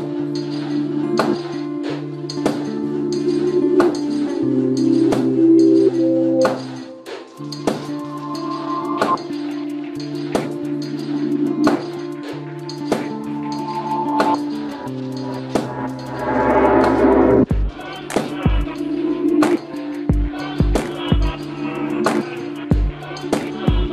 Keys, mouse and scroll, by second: 0.9 g, 2.7 right click, 2.9 g, 3.3-4.4 right drag, 5.6-7.1 middle drag, 7.1-8.3 right drag, 7.2 g, 9.0 g, 14.2 right click, 14.4 click, 14.4 g, 15.3-19.3 right drag, 15.6 g, 17.1 g, 18.3 g, 19.3-20.6 drag, 19.9 g, 20.9 g.